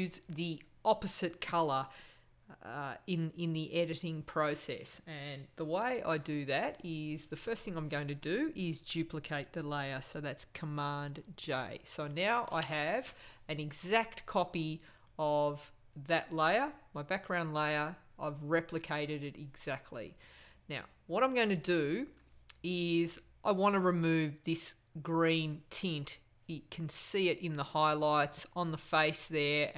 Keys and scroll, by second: 10.9 super+j.